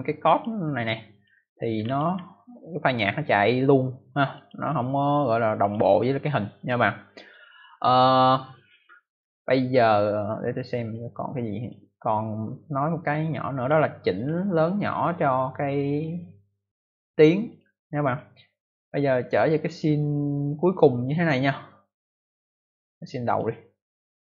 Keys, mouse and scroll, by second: 0.2 click, 0.7 click, 1.3 scroll down 1, 1.7 scroll up 1, 3.3 scroll up 1, 4.3 click, 5.5 click, 6.5 click, 10.7 click, 11.5 click, 12.9 click, 14.1 click, 17.4 click, 19.6 click, 23.2 click.